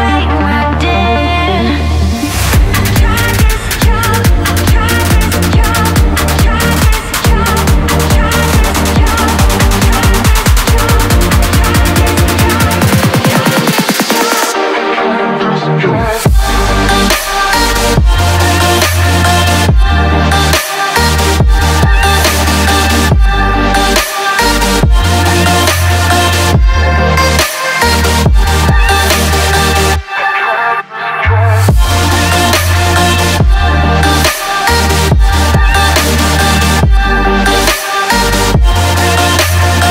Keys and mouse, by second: 0.0 click, 1.5 drag, 2.1 Tab, 2.6 click, 5.8-7.4 drag, 8.8-11.9 shift+drag, 12.2 alt+z, 12.5-14.4 drag, 15.5-19.7 shift+drag, 20.4 drag, 21.3 click, 22.2 shift+d, 22.7-23.2 drag, 23.8 alt+z, 24.1-25.0 drag, 25.7 click, 26.1 Tab, 28.3 ctrl+r, 31.8 Tab, 34.0 click, 34.5 shift+click, 35.5 ctrl+l, 38.1 click, 38.8 ctrl+s, 39.1 a, 39.2 a, 39.7-39.9 drag.